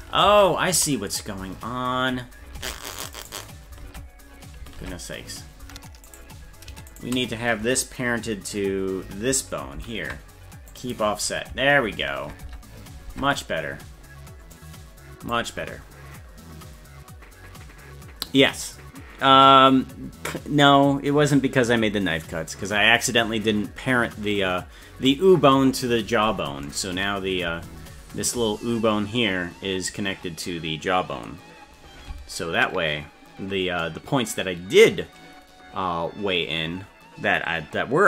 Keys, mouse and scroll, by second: 0.3 ctrl+z, 2.6 ctrl+Tab, 3.2 right click, 3.8 ctrl+Tab, 4.9 ctrl+Tab, 5.6 Tab, 6.1 right click, 7.0 shift+right click, 9.8 ctrl+p, 12.5 Tab, 13.1 ctrl+Tab, 14.5 click.